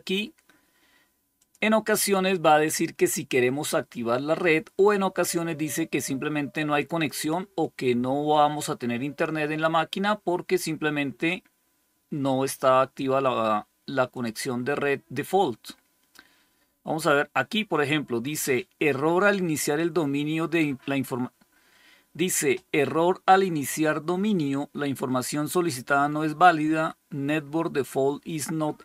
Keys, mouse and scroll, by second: 1.3 click, 6.7 click, 7.1 click, 14.0 click.